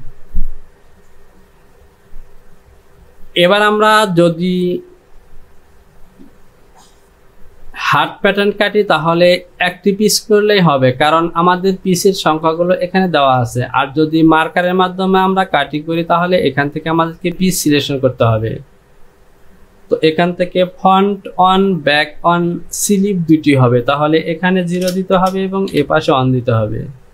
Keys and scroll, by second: 21.6 Down, 22.3 Down, 24.8 KP_0, 25.2 Right, 25.8 KP_1.